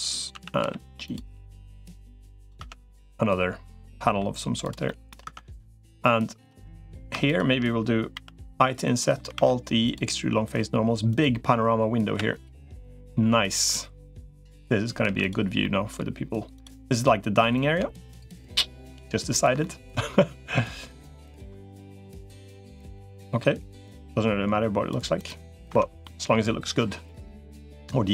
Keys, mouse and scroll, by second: 0.1 a, 0.5 g, 1.5 click, 2.5 Tab, 2.7-4.0 middle drag, 4.6 middle click, 5.1 Tab, 5.3 click, 7.1 shift+click, 7.9 i, 9.1 alt+e, 11.9 g, 14.9 2, 15.4 middle click, 16.7 click, 17.3-19.3 drag, 19.4 middle click, 21.1-22.3 ctrl+drag, 23.1 middle click, 23.7-24.7 drag, 25.5 Tab, 25.8 middle click, 27.1 middle click.